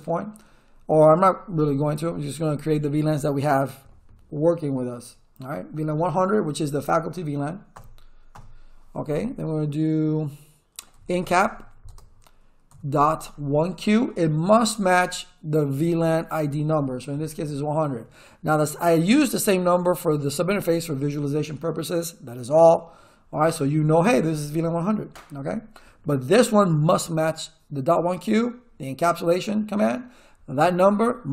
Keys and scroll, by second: 7.7 Return, 10.7-12.7 typing, 12.9 Tab, 17.1 1, 17.4 0.